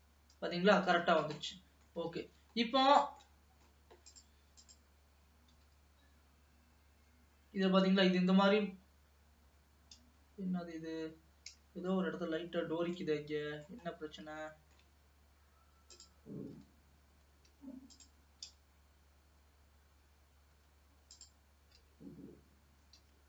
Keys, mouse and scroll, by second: 1.5 middle click, 2.4 ctrl+s, 2.7 scroll up 2, 2.9-3.3 scroll down 2, 3.3 middle click, 4.1 click, 4.7 click, 5.7 g, 13.0 middle click, 14.0-14.5 scroll up 1, 14.5-16.0 shift+middle drag, 16.0 click, 16.7 g, 18.0 click, 18.7 g, 21.2 click, 22.0 g.